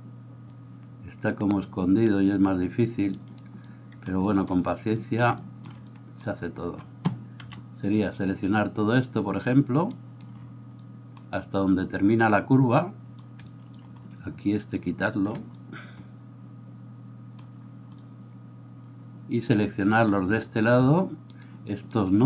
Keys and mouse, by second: 7.4 c, 14.8 shift+right click, 21.3-22.2 shift+right drag.